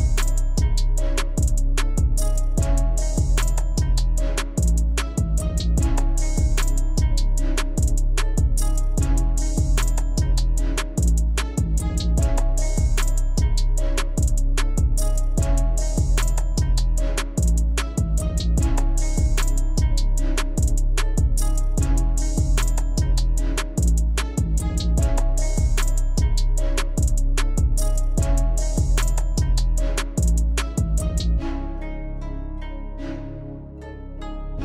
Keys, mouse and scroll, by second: 0.8-3.5 scroll down 1, 11.3-15.2 drag, 17.6 click, 25.4-30.4 drag, 33.6 click.